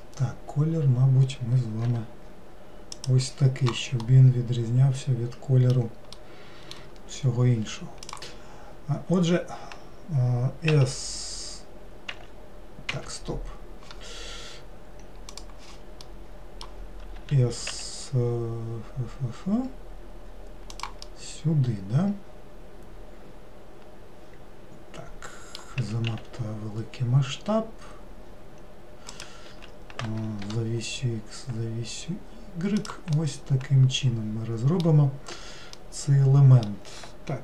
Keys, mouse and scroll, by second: 4.1-9.1 middle drag, 9.1-12.1 scroll up 1, 16.1-17.2 middle drag, 17.2 s, 21.1-24.1 middle drag, 33.2-37.4 middle drag.